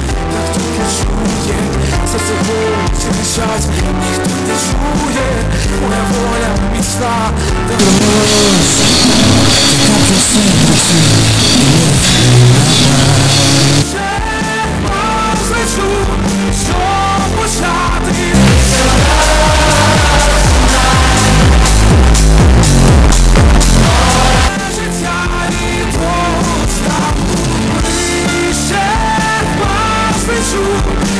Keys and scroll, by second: 13.8 Page_Down, 24.5 Page_Down.